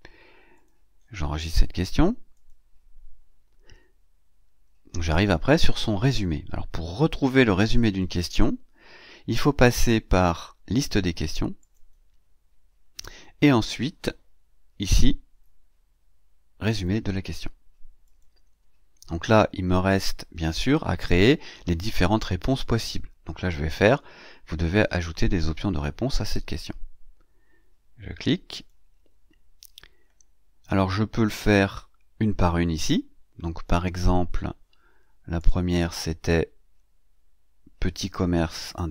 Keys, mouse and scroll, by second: 0.4 click, 0.8 scroll up 2, 2.2 click, 7.8 click, 10.0-10.6 scroll down 4, 11.5 click, 17.9 click, 28.4 click, 35.3 click, 37.7 click.